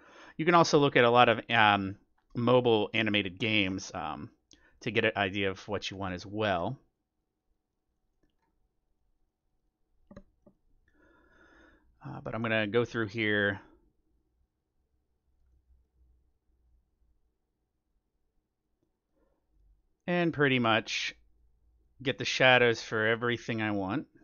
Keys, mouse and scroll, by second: 3.5-5.2 middle drag, 5.8-6.2 scroll down 1, 6.2-7.7 middle drag, 6.9-12.9 drag, 7.9-9.8 middle drag, 10.4-12.1 middle drag, 12.2-13.4 middle drag, 14.5-18.0 drag, 14.5 middle click, 15.5-17.2 middle drag, 18.8-20.5 middle drag, 19.5-24.2 drag, 23.0-24.2 middle drag.